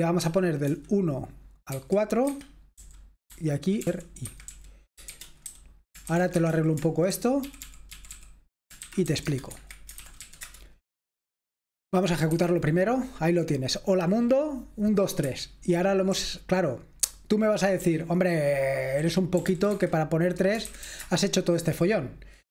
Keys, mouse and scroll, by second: 0.0-0.6 typing, 1.6 typing, 2.2 Escape, 3.0-12.2 typing, 12.4 F5, 15.3 Escape, 16.1 k, 17.8-21.4 typing, 19.7 Escape.